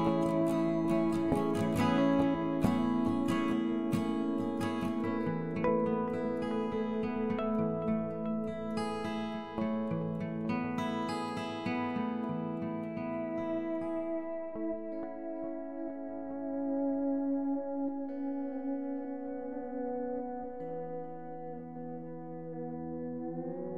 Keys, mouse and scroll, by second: 0.1 g, 2.1 g, 5.8 q, 6.0 q, 6.8-8.7 drag, 8.8-10.5 drag, 11.2-13.5 right drag, 12.6 f, 14.0 middle click, 20.9-22.7 right drag, 22.7 q, 22.9 q.